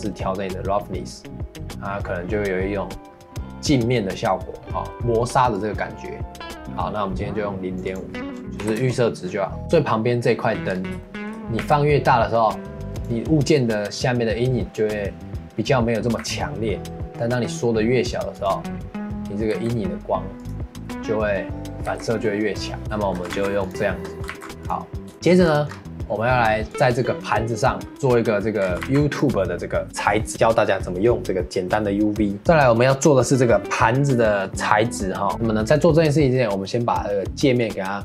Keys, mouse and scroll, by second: 5.5-9.7 drag, 10.7 scroll up 3, 11.0-11.6 shift+middle drag, 11.6 s, 16.2 s, 19.5 s, 21.9 s, 22.8 scroll up 2, 23.0-23.3 shift+middle drag, 23.3 ctrl+s, 24.3 ctrl+s, 25.1 shift+middle click, 25.4-25.8 scroll up 8, 26.7 click, 28.6 scroll down 4, 28.8 ctrl+s, 32.4 ctrl+s, 37.6-38.0 drag.